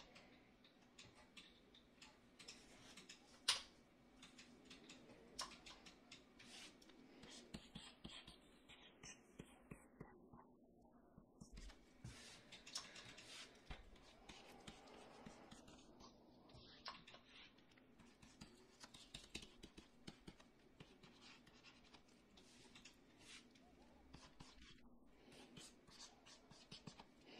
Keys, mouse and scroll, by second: 3.4 /.